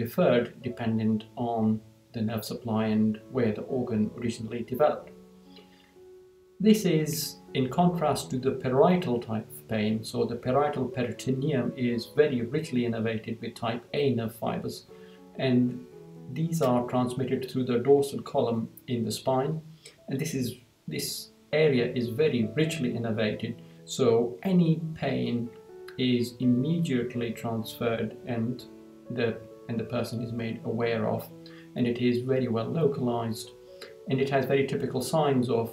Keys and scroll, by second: 5.4 Down.